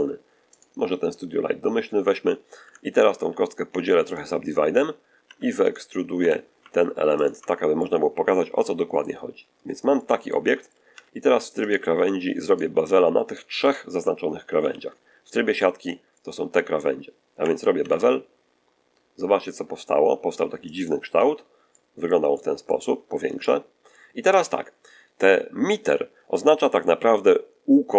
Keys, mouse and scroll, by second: 0.4 click, 2.5 Tab, 3.1 w, 3.9 click, 5.1 3, 5.5 middle click, 6.1 e, 7.1 ctrl+click, 7.7-9.1 ctrl+middle drag, 9.3 scroll up 1, 9.8 shift+middle click, 10.8 shift+2, 11.5 shift+right click, 12.3 shift+right click, 13.2 shift+right click, 14.5 z, 16.1-16.4 scroll up 2, 16.6 scroll down 2, 17.7 ctrl+b, 20.6 click, 21.0 z, 21.6 middle click, 22.2 middle click, 22.8-23.1 scroll up 2, 23.3-24.3 shift+drag.